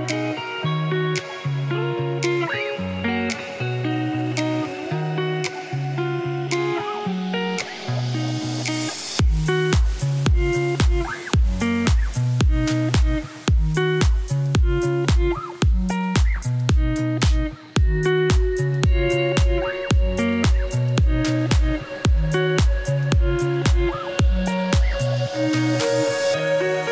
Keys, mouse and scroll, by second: 1.2 Tab, 1.4 scroll down 2, 1.8 scroll up 2, 2.1 middle click, 2.6 scroll down 1, 2.8 middle click, 3.4 click, 3.9 z, 4.2 z, 5.5 scroll up 5, 5.7 right click, 6.1 middle click, 6.9 click, 7.0 Tab, 7.2 middle click, 7.5 ctrl+r, 8.3 s, 9.2 s, 12.3 alt+click, 12.6 alt+click, 13.3 scroll up 2, 13.5 shift+middle click, 14.2 alt+click, 14.6 alt+click, 15.2 middle click, 15.8 s, 17.9 Tab, 18.6 scroll down 1, 19.3 Tab, 20.1 s, 21.0 Tab, 21.5 Tab, 22.4 s, 23.1 Tab, 23.4-24.7 middle drag, 24.7 ctrl+z, 25.0 ctrl+z, 25.7 s.